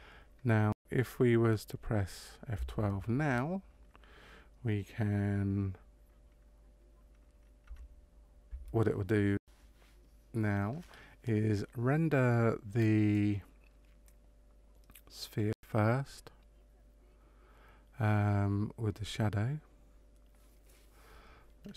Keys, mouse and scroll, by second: 7.7 F12.